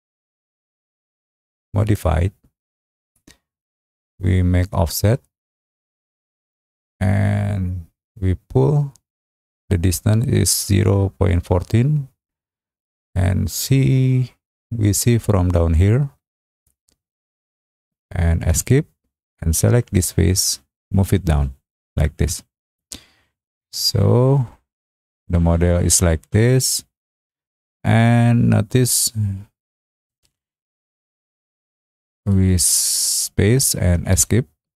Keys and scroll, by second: 15.0 Return, 18.4 Escape, 32.8 space, 34.1 Escape.